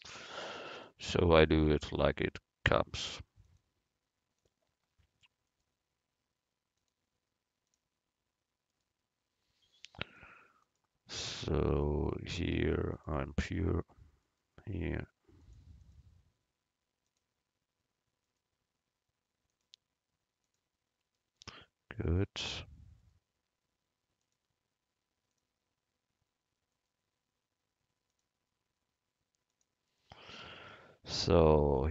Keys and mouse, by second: 1.9-3.7 right drag, 3.5-4.9 drag, 4.9 middle click, 5.6-7.2 right drag, 6.8-8.8 drag, 8.8 middle click, 8.9-10.4 right drag, 10.1-13.5 drag, 13.5 middle click, 14.3-17.7 right drag, 15.5-17.7 drag, 18.4-19.6 right drag, 23.1-25.0 right drag, 24.3-26.2 drag, 26.8-30.0 right drag, 28.2-30.0 drag, 31.3 middle click.